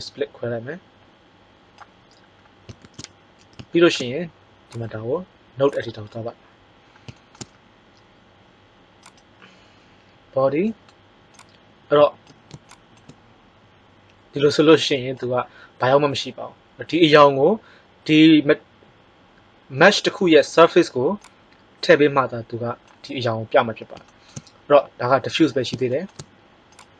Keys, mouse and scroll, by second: 2.8 shift+z, 5.7 shift+z, 11.3 click, 21.1-22.9 drag, 26.6 click.